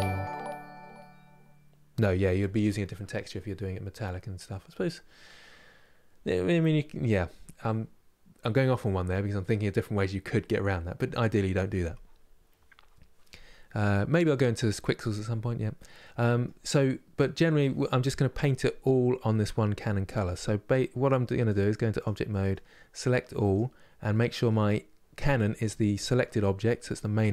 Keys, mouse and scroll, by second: 15.4 scroll up 1, 15.5-16.3 scroll down 1, 16.3-21.7 middle drag, 21.7 click, 22.0-23.2 middle drag, 23.2 click, 23.8-27.3 middle drag.